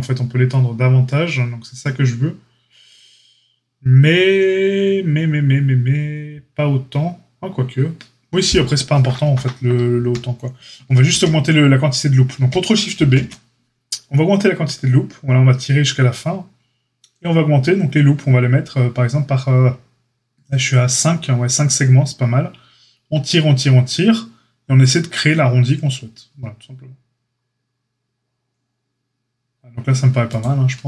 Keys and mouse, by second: 9.9 ctrl+a, 11.1 ctrl+z, 12.9 ctrl+shift+b.